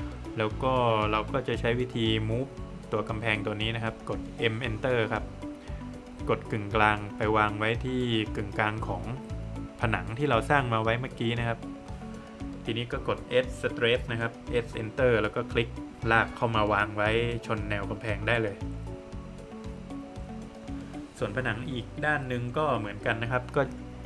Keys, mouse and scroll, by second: 0.7 Escape, 1.2 click, 1.6 double click, 2.0 scroll up 2, 3.5 space, 5.1 space, 5.2 click, 6.9-7.2 scroll up 3, 10.0 click, 10.5 scroll down 1, 11.1 middle click, 12.4 space, 12.8 click, 14.3 space, 15.3 click, 17.0 Escape, 17.5 middle click, 18.3 scroll down 1, 18.5 middle click, 21.5 click, 23.2 space, 23.8 click.